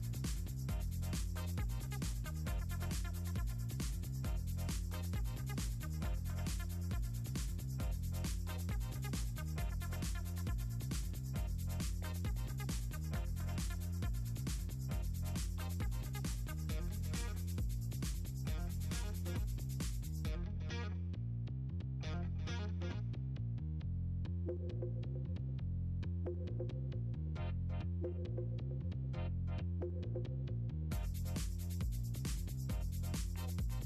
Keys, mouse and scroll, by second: 0.1 click, 1.8 click, 3.1 click, 4.2 click, 4.6 click, 6.9 click, 7.4 click, 7.9 click, 8.4 right click, 9.8 right click, 10.4 click, 10.5 click, 12.4 click, 13.5 click, 14.3 click, 14.5-15.6 scroll down 8, 15.8 middle click, 16.7 click, 20.9 scroll up 2, 21.5-21.9 scroll down 4, 23.4 scroll up 2, 23.6 click, 23.8 click, 24.4 click, 27.2 ctrl+scroll up 2, 28.0 click, 28.3 shift+click, 28.9 ctrl+click, 29.1 click, 29.5-31.8 drag, 32.0-33.1 drag, 33.4-33.8 drag.